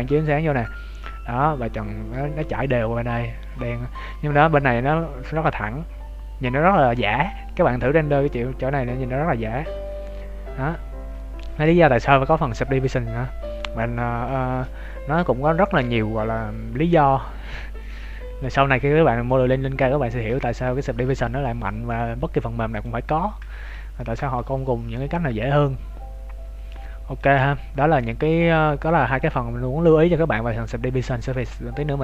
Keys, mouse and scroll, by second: 22.7 click, 23.4 scroll down 1, 23.9 shift+middle click, 23.9-24.3 scroll down 2, 24.3 middle click, 27.3 middle click, 27.4 shift+middle click, 30.4 right click.